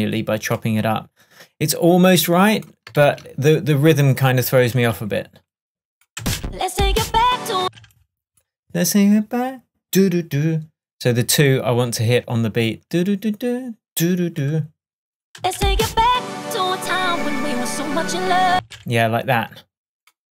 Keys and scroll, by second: 3.0 super+e, 6.2 space, 7.6 space, 15.4 space, 18.6 space.